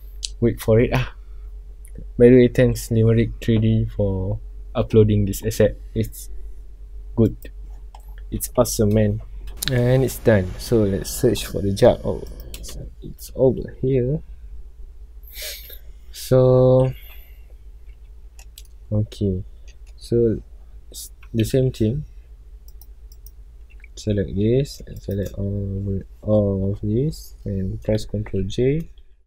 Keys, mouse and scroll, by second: 9.7 scroll down 1, 12.5 click, 15.5 KP_Decimal, 16.1 scroll down 1, 17.9 scroll down 1, 18.3-19.0 middle drag, 19.0 scroll up 1, 19.7 scroll down 1, 23.1 click, 25.2 shift+click, 27.4 scroll up 1, 28.8 ctrl+j, 29.1 scroll up 1.